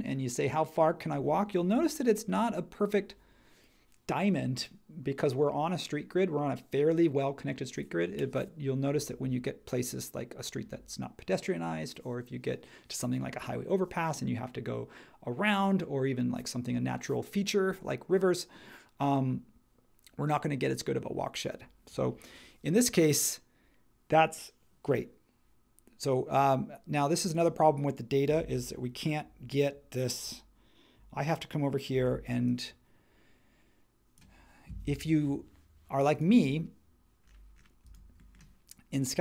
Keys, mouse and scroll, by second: 31.9 shift+super+4.